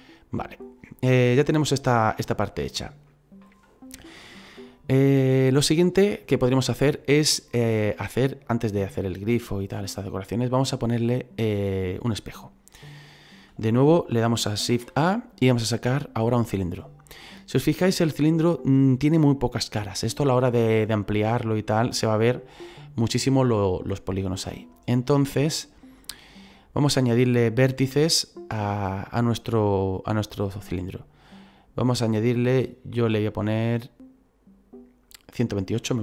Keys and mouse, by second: 0.0 middle click, 2.7 shift+middle click, 4.0 shift+middle click, 13.0 click, 14.7 shift+a, 16.4 click, 17.6 shift+middle click, 24.9 click, 30.7 click, 35.4 click.